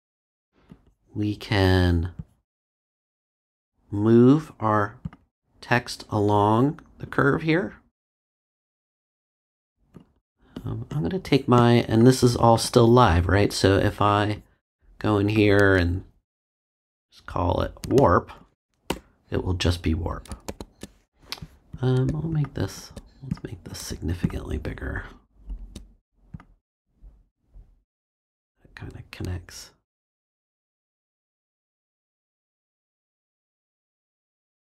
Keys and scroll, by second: 18.8 BackSpace, 20.5 super+z.